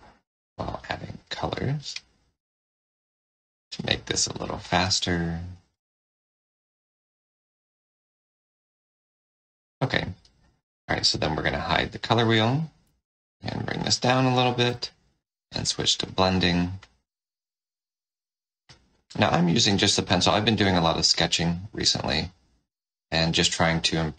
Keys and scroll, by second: 11.2 F6, 14.6 4.